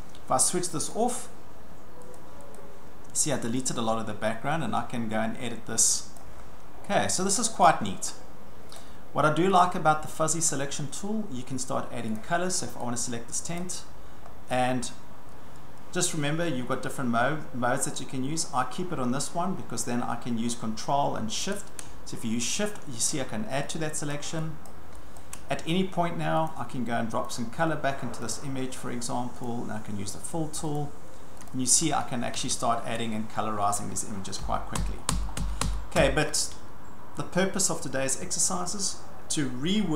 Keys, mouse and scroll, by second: 0.0-0.8 ctrl+scroll, 0.9 click, 2.2 click, 2.5 click, 3.4 click, 3.7 click, 6.2 click, 6.4-6.9 ctrl+scroll, 6.9-8.0 ctrl+scroll, 8.8 click, 9.6 click, 10.1 ctrl+middle click, 10.2 ctrl+middle click, 10.5 ctrl+middle click, 11.0 ctrl+middle click, 12.0 ctrl+scroll, 12.2 click, 13.6 click, 14.3-14.9 ctrl+scroll, 14.9 ctrl+scroll, 21.9 ctrl+scroll, 23.1 shift+click, 24.2 shift+click, 24.7 shift+click, 25.2 shift+click, 26.5 click, 27.3 click, 28.3 click, 29.5 click, 30.8 click, 31.5 click, 31.8-33.0 ctrl+scroll, 34.4 ctrl+z, 34.8 ctrl+z, 35.4 ctrl+z, 35.6 ctrl+z, 36.0 ctrl+z, 38.0-38.6 scroll.